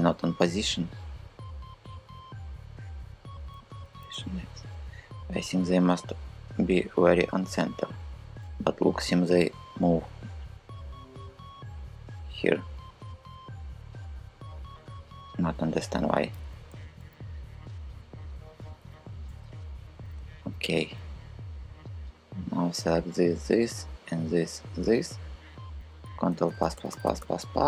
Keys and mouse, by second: 1.0-2.6 drag, 3.0 r, 3.7 x, 8.6 g, 9.1 y, 16.3 KP_3, 19.7 KP_3, 25.9 ctrl+KP_Add, 26.2 ctrl+KP_Add, 26.3 ctrl+KP_Add, 26.4 ctrl+KP_Add, 26.6 ctrl+KP_Add, 26.7 ctrl+KP_Add, 26.9 ctrl+KP_Add, 27.1 ctrl+KP_Add.